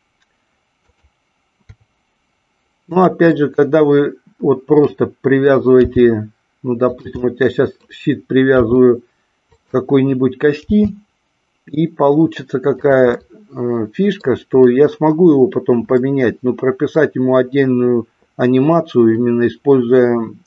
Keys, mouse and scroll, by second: 0.8 click, 1.7 r, 3.2-4.8 middle drag, 5.8 g, 6.9 click, 7.2 middle click, 8.6 r, 9.6 click, 10.7 g, 12.8 click, 13.2-14.2 middle drag, 16.1-16.9 middle drag.